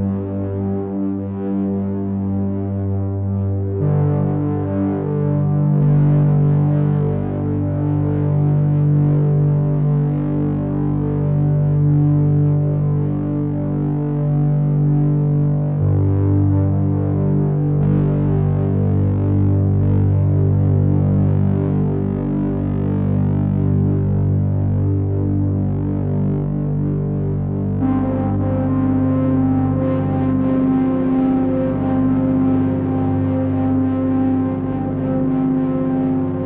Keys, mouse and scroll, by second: 1.4 click, 3.5 middle click, 6.8 click, 9.1 middle click, 10.9 click, 12.5 middle click, 14.0 click, 15.4 x, 16.8 middle click, 29.7 click.